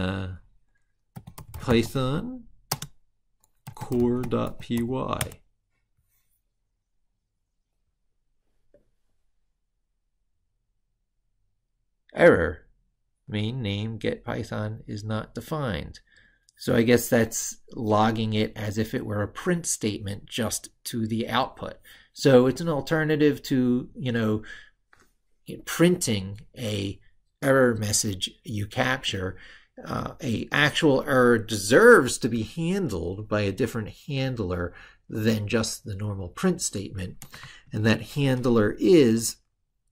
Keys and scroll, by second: 37.2 ctrl+super+Left.